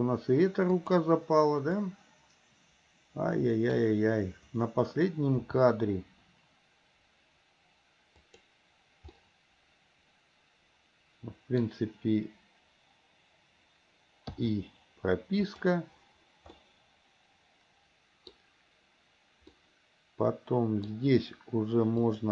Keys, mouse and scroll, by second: 0.7 click, 2.0-3.9 middle drag, 5.6 r, 9.2-11.9 middle drag, 15.6 click, 16.7-18.6 middle drag, 19.7-21.1 middle drag, 22.2 click.